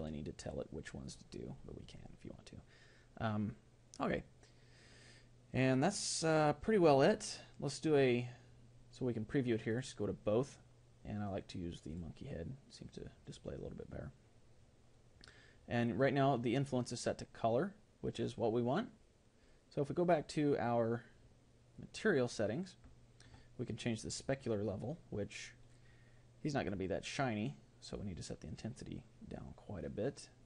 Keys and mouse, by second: 25.6 click, 25.6-28.0 middle drag, 28.0-29.7 drag.